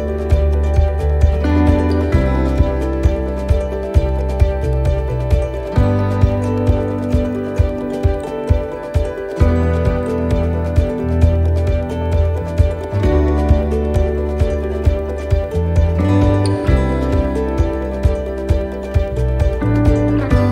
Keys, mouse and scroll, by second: 0.7 middle click, 2.8 click, 4.8 right click, 5.7 scroll down 1, 6.8 click, 8.5 middle click, 10.3 right click, 11.6 click, 12.8 middle click, 13.2 scroll down 1, 14.0 right click, 14.4 l, 15.2 click, 17.5 middle click, 18.4 scroll up 2, 19.0 middle click, 20.0 middle click.